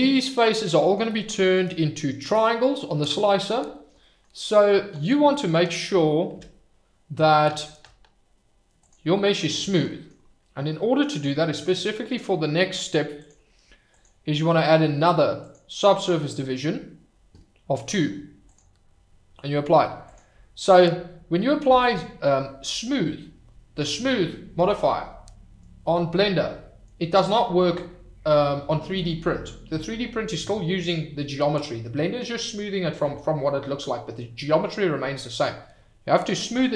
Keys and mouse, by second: 0.5-0.9 middle drag, 4.0 middle click, 6.3 Tab, 8.8 click, 9.6 shift+right drag, 9.8 middle drag, 13.1 click, 14.0-16.6 drag, 18.4 click, 20.0-22.1 drag.